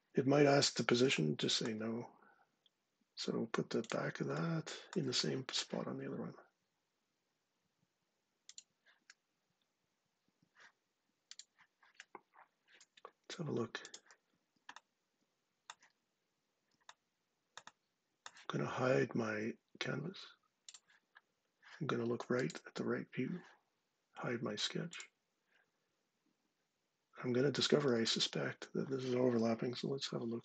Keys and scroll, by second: 30.1 ctrl+8.